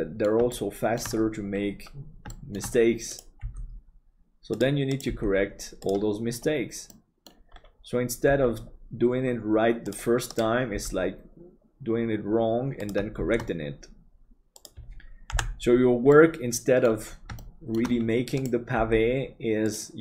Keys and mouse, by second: 0.5 shift+middle click, 2.4 shift+middle click, 3.4 g, 5.1 g, 6.9 middle click, 8.2 g, 10.7 g, 13.2 shift+d, 15.4 Delete, 16.1 middle click, 17.4 middle click, 18.7 g.